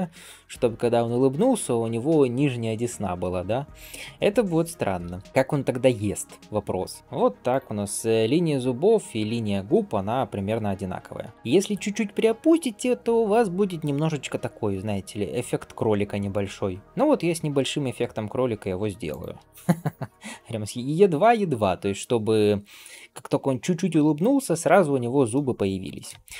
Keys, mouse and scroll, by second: 3.8 g, 25.7 scroll down 1.